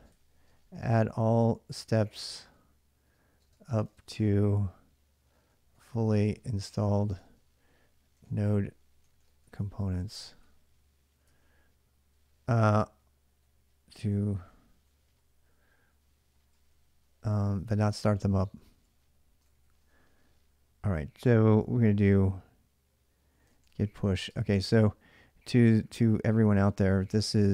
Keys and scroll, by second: 0.0-17.0 typing, 18.2 ctrl+[, 19.2 shift+z, 19.4 shift+z, 23.0-24.4 typing, 26.3-27.2 typing.